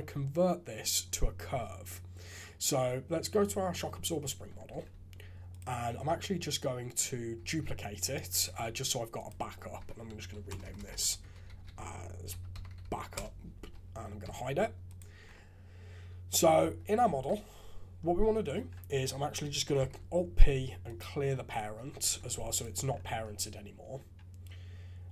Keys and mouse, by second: 3.9 click, 4.7 alt+a, 5.5 right click, 7.4 shift+d, 8.5 alt+a, 9.1 click, 9.7 F2, 10.6 BackSpace, 10.7 BackSpace, 14.2 h, 16.6 Tab, 17.1 alt+a, 18.7 Tab, 19.7 alt+p, 22.0 alt+a, 22.5 click.